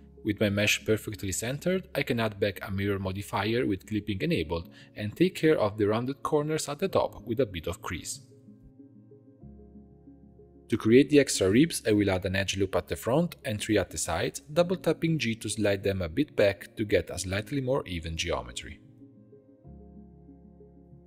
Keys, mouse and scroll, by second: 0.0 click, 0.1 middle click, 0.2 shift+s, 1.8-2.6 shift+middle drag, 2.6-5.1 drag, 5.7 click, 6.4 click, 6.9-7.7 middle drag, 7.7 click, 7.9 Tab, 8.1 2, 8.5 click, 9.0 shift+click, 9.6 shift+e, 10.2-11.9 shift+middle drag, 12.0 click, 13.6 ctrl+r, 14.8 middle click, 15.7-16.3 scroll up 1, 16.3 ctrl+r, 19.1 g, 20.9 click.